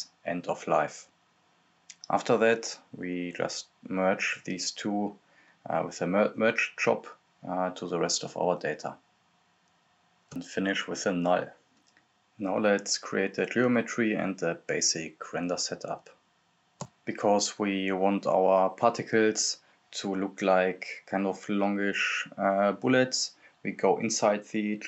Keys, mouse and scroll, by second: 0.4-1.4 typing, 1.8-4.8 drag, 4.8-5.2 scroll up 1, 5.2-5.7 scroll down 1, 5.7-7.4 drag, 8.0 click, 8.5-9.0 scroll down 1, 9.0 right click, 9.4-10.5 typing, 10.9 click, 12.2-16.0 typing, 12.7 click, 13.6 click, 14.3 click, 14.9 click, 15.7 click, 16.8 click, 17.2-18.2 scroll up 1, 18.2 click, 20.8-21.3 scroll down 1, 21.3 click, 23.4-24.6 typing.